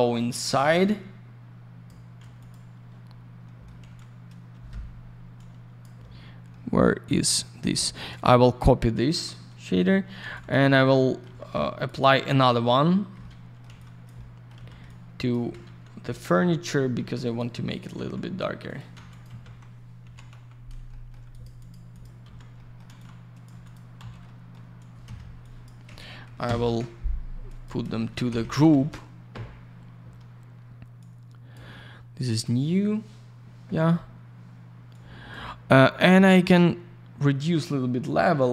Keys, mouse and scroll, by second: 0.1 click, 0.3 click, 0.5 alt+я, 0.6 click, 2.4 click, 2.5 click, 3.0 scroll down 1, 3.4 middle click, 3.8 alt+я, 3.9 click, 4.7 Escape, 6.0-6.5 scroll up 1, 6.5 middle click, 7.4 middle click, 7.6 middle click, 7.9 scroll down 1, 8.4 shift+click, 10.3 click, 10.5 click, 10.6 click, 10.7 double click, 10.9 middle click, 11.8 ctrl+click, 12.0 ctrl+click, 12.3 ctrl+click, 12.4 ctrl+double click, 13.2 alt+middle click, 13.6 alt+я, 13.8 click, 14.1 alt+middle click, 14.5 й, 14.8 ctrl+click, 16.1 click, 16.2 click, 16.6 click, 16.7 double click, 17.2 click, 17.3 click, 17.7 click, 17.8 double click, 17.9 typing, 18.6 click, 18.7 click, 19.1 click, 19.2 double click, 19.2-20.8 typing, 20.6 scroll down 1, 20.9 alt+middle click, 21.3 alt+click, 21.4 alt+click, 21.6 alt+click, 21.7 alt+double click, 21.9 alt+click, 22.0 alt+click, 22.2 alt+й, 22.5 alt+middle click, 22.9 alt+я, 22.9 click, 23.6 click, 23.7 click, 24.2 alt+middle click, 24.7 scroll down 1, 25.0 F4, 25.4 click, 25.8 F4, 26.6 ctrl+n, 27.5 click, 27.6 click, 27.9 alt+shift+й, 28.2 F4, 29.0 typing, 30.6 scroll up 1, 31.0 click, 32.3 click, 32.4 click, 34.9 click, 36.4 click.